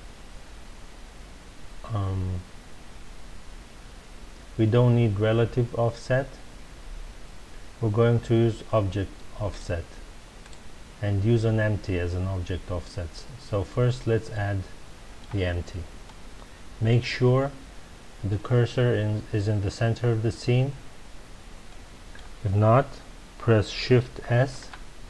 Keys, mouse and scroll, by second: 9.5 click, 10.4 click, 14.3-17.3 middle drag, 21.6-24.5 middle drag, 24.5 shift+s.